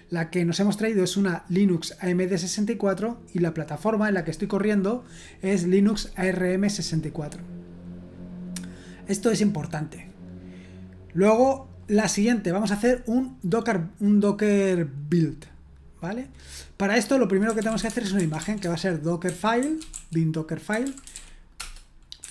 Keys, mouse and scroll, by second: 7.6-8.8 drag, 11.5-12.3 scroll down 1, 17.2-22.3 typing.